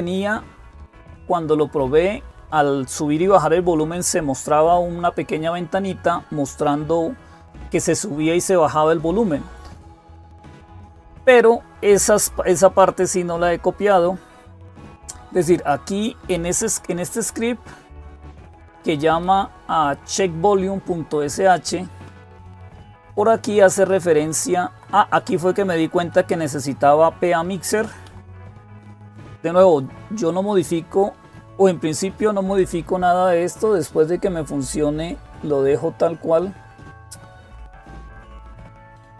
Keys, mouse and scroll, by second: 13.6 click, 17.4 Down, 17.7 Down, 17.8 Down, 18.0 Down, 19.1-20.9 Right, 21.7 Down, 22.0 Down, 22.2 Down, 22.4 Down, 22.6 Down, 23.0 Down, 23.2 Down, 23.6 Down, 23.7 Down, 23.9 Down, 24.3 Down, 24.5 Down, 25.0 Up, 25.2 Up, 25.4 Up, 25.6 Up, 25.7 Up, 26.6 Up, 26.6-27.5 Left, 27.9 Down, 27.9 Left, 28.1 Down, 28.2 Down, 28.4-29.4 Down, 31.7 Down, 34.5-35.5 Up, 36.1 Up, 38.0 Up.